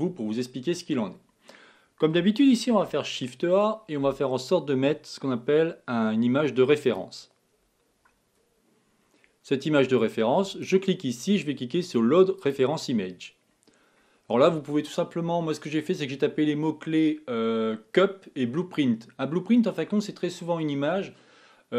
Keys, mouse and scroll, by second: 3.1 shift+a, 13.7 scroll down 4, 14.4 scroll down 2, 14.4 scroll up 1.